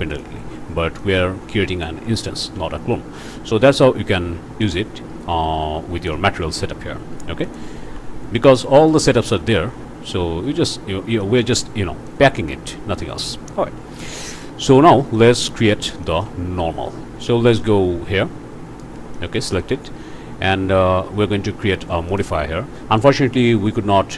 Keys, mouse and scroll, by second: 0.1 click, 1.0-2.0 drag, 2.4 Tab, 4.6-6.3 drag, 6.5 Tab, 6.9-7.4 scroll down 1, 7.4 click, 7.8 Tab, 8.1-8.6 scroll down 2, 8.7 click, 9.6 scroll down 1, 9.9-10.2 scroll up 1, 10.8-11.1 scroll up 1, 11.2 click, 12.1 click, 12.4 Tab, 12.9 scroll up 1, 14.0 click, 15.1 click, 16.0 shift+click, 16.6 alt+shift+a, 17.5 click, 18.0 scroll down 2, 19.1 click, 22.1 click.